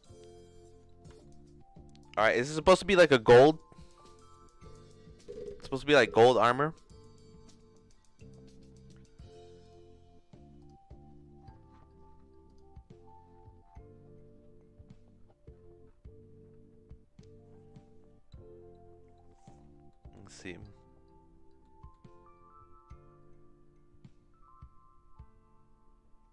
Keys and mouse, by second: 1.2 shift+middle click, 9.6-10.6 drag, 12.5 click, 19.9 middle click, 21.6 middle click, 22.8-26.3 drag.